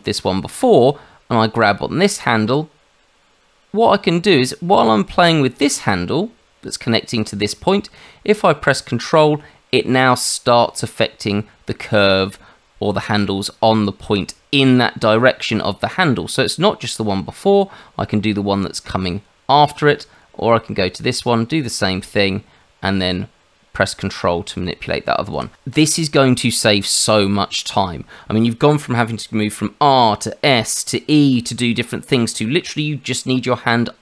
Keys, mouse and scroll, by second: 1.5 click, 20.9 click.